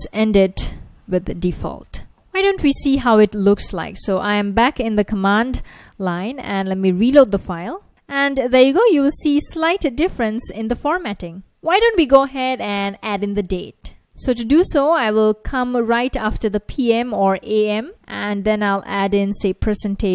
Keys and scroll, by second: 0.0-2.1 typing, 2.1 super+s, 2.4 super+Tab, 6.9 ctrl+a, 7.0 r, 13.3 super+Tab, 16.9-17.8 typing.